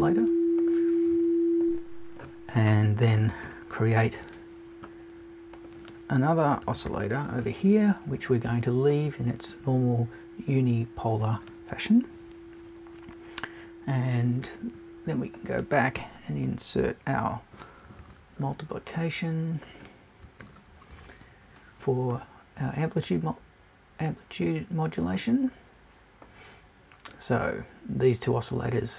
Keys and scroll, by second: 16.0 BackSpace.